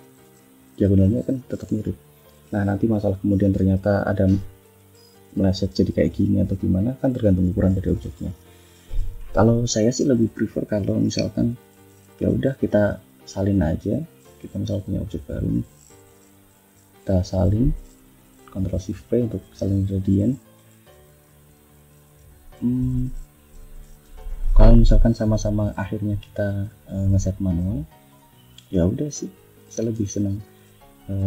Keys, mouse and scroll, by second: 0.3 ctrl+click, 1.5 click, 2.1 click, 3.3-4.5 drag, 5.6 click, 7.1 ctrl+z, 7.9 ctrl+z, 9.1 ctrl+scroll up 2, 9.6 ctrl+scroll down 2, 12.1 click, 15.1 click, 15.6 click, 16.5 click, 17.2 ctrl+c, 17.4 ctrl+click, 18.5 ctrl+shift+v, 19.3 F1, 19.8 click, 22.0 click, 23.6 shift+click, 24.6 click, 25.3 click, 26.7 click, 28.3 click, 29.5 shift+click, 30.0-31.2 shift+drag.